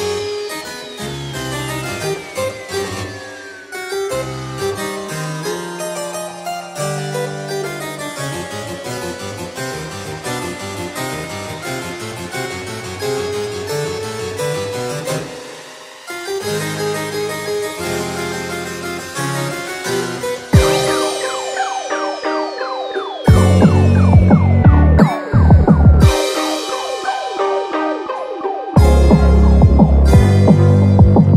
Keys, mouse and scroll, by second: 12.7-13.2 scroll down 2, 13.2 middle click, 13.5-13.8 scroll up 5, 13.8 middle click, 14.3-14.7 scroll down 5, 14.7 middle click, 15.1 shift+middle click, 15.3 middle click, 15.7 shift+middle click, 15.9 middle click, 15.9 scroll up 1, 16.4-16.9 scroll down 4, 16.9 middle click, 17.6 scroll down 1, 17.7-18.1 scroll up 8, 18.1 middle click, 18.3-19.1 scroll down 3, 19.1 click, 19.7 scroll down 1, 20.0 middle click, 20.7 shift+middle click, 21.0 scroll up 2, 23.4 click, 26.4 click, 28.5 ctrl+a, 28.5 shift+middle click, 28.5-28.9 scroll up 4.